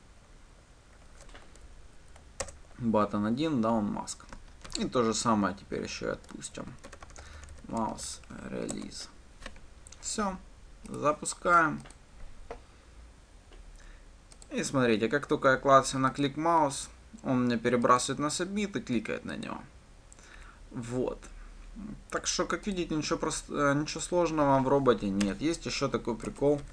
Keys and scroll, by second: 5.2 ctrl+d, 9.1 Return, 12.3 ctrl+shift+F10.